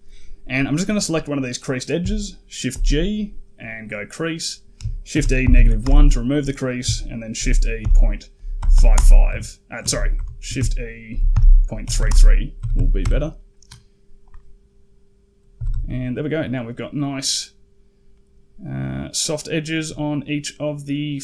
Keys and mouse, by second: 2.5 shift+g, 5.0 shift+e, 7.2 shift+e, 9.1 a, 9.7 ctrl+z, 10.0 ctrl+z, 10.9 shift+e, 12.4 a, 12.6 a, 12.8 Tab, 14.7-15.1 drag, 15.4 a, 15.5 a, 15.7 middle drag, 17.2-17.7 middle drag, 18.0-18.8 middle drag, 19.0-19.7 middle drag, 20.1-20.7 middle drag, 21.0-21.2 middle drag.